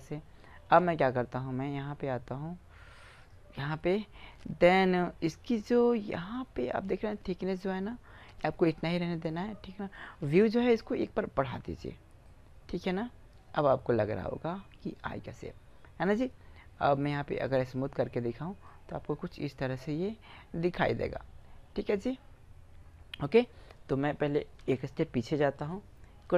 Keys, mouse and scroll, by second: 1.3 middle click, 2.9-4.6 drag, 10.8-12.2 drag, 12.2-13.6 middle drag, 15.0-17.2 middle drag, 17.2-18.9 drag, 18.9-20.2 middle drag, 24.4 ctrl+z.